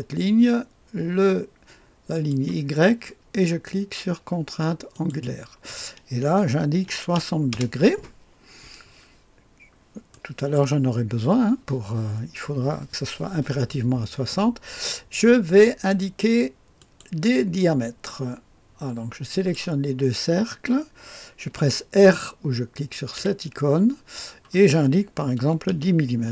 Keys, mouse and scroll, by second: 2.1 click, 4.9 click, 6.8 KP_6, 7.1 KP_0, 7.5 Return, 9.4-10.1 scroll up 1, 10.1 click, 10.6 right click, 16.8 click, 19.3 click, 23.1 typing, 25.3-25.7 typing.